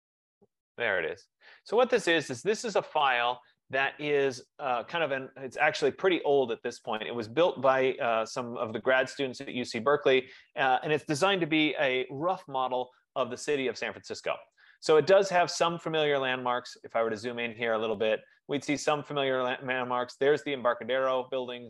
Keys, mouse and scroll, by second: 3.0 right click, 4.0 click, 11.7 z, 12.3 Return, 14.8 click, 15.7 F15, 19.7 click.